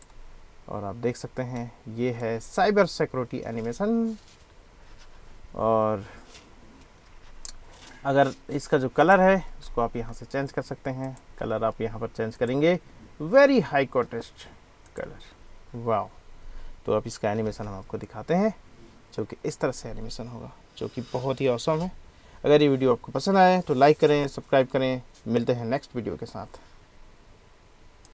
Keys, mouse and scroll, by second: 1.6 click, 9.0 click, 11.1 click, 12.5-15.0 drag, 17.4 space, 17.6 space.